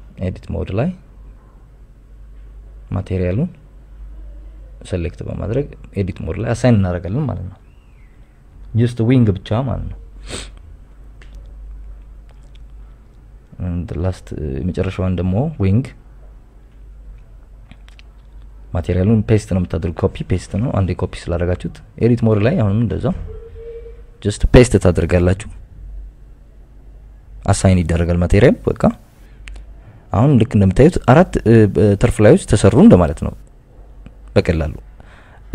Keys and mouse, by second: 2.5 x, 2.7 ctrl+v, 7.5 Tab, 8.3 click, 9.3 shift+click, 10.4 ctrl+KP_Add, 13.0 Tab, 14.1 Tab, 15.0 Tab, 15.8 click, 17.0 click, 17.3 click, 17.8 click, 19.9 x, 20.1 ctrl+v, 21.2 click, 24.3 Tab, 26.1 shift+click, 27.1 ctrl+KP_Add, 27.5 ctrl+KP_Add, 30.3 click, 31.2 Tab, 32.5 KP_Subtract, 32.7 KP_Subtract, 32.9 KP_Subtract, 35.3 KP_1.